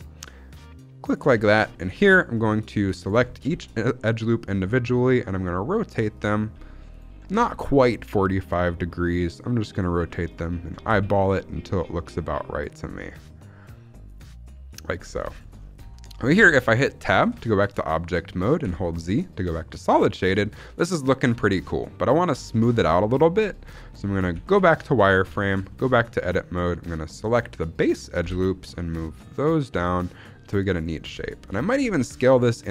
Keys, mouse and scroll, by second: 1.0 click, 1.3 shift+middle click, 1.5-1.9 scroll up 2, 1.9-2.8 scroll down 1, 2.9 alt+click, 3.4 r, 6.0 click, 6.8 alt+click, 7.3 r, 9.6 click, 10.2 alt+click, 10.8 r, 14.7 click, 14.9-16.5 scroll down 6, 15.2 shift+middle click, 15.8 shift+middle click, 16.5-16.9 scroll up 1, 16.9 Tab, 17.4 shift+middle drag, 17.7 scroll up 2, 18.5 z, 19.8 scroll down 1, 20.0 shift+middle drag, 20.2-20.9 scroll up 2, 21.4-22.7 scroll up 1, 22.7 scroll up 2, 22.8-23.3 shift+middle drag, 24.2 z, 25.2 Tab, 25.6 shift+middle click, 25.8-26.4 scroll up 1, 26.4-27.1 scroll up 1, 27.1 alt+click, 28.1 g, 30.7 click, 30.9 scroll down 1, 31.1 shift+middle click, 31.7 s.